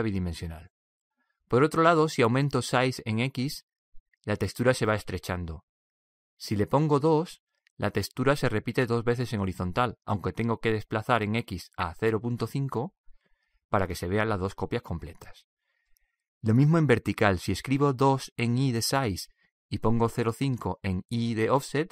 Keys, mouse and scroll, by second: 3.1-8.1 drag, 11.1-12.8 drag, 17.0-18.8 drag, 19.5-21.3 drag.